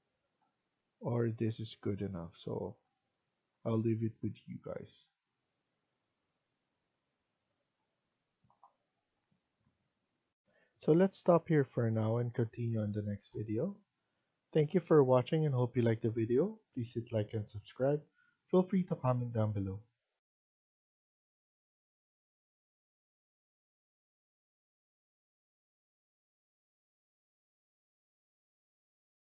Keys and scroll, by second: 20.1 F2.